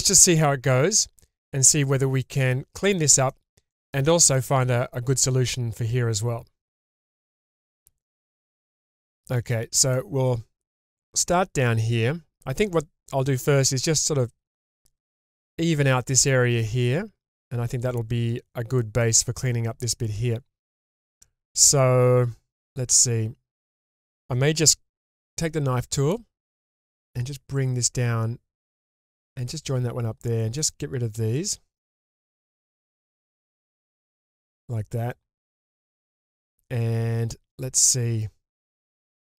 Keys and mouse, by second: 2.3 middle click, 3.3 shift+middle click, 3.7 shift+middle drag, 4.1 shift+middle drag, 7.9 shift+middle drag, 8.3 shift+middle drag, 8.7 shift+middle click, 9.1 middle click, 9.9-10.7 middle drag, 11.2-12.5 middle drag, 18.8 middle click, 19.9-23.7 middle drag, 25.1 k, 30.6 click, 33.7 ctrl+x, 34.5-37.8 middle drag, 39.0-39.3 middle drag.